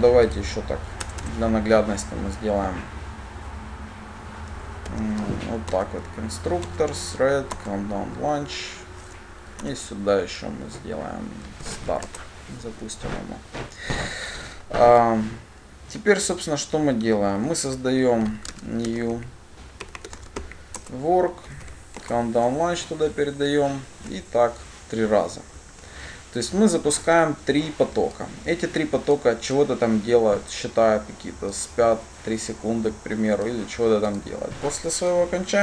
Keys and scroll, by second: 5.6 alt+Insert, 6.1 alt+Insert, 13.1 Return, 21.1 Return, 25.5 ctrl+d.